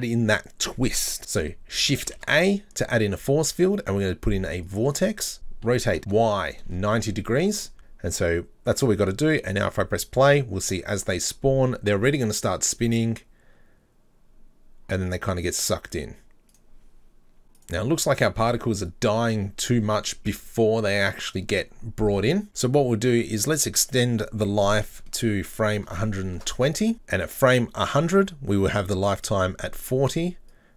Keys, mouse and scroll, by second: 2.1 shift+a, 5.7 r, 8.7 click, 9.3 click, 16.5 click, 17.5 click, 18.9-21.9 drag, 24.2 click, 27.2-28.6 drag, 28.6-30.5 right drag, 30.5-30.7 drag.